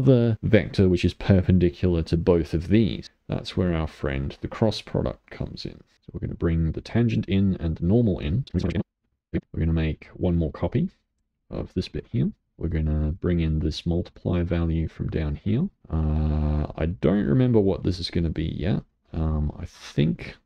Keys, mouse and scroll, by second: 1.9-3.6 middle drag, 3.6-5.9 drag, 7.0-8.4 drag, 8.4 scroll down 6, 8.9 g, 9.2 click, 9.3 scroll up 5, 9.3-10.6 middle drag, 10.6-12.0 drag, 12.0 shift+d, 12.4 middle click, 13.1-14.3 drag, 15.1 click, 15.9-16.7 scroll up 1, 16.7-17.7 shift+middle drag, 17.7-20.4 drag.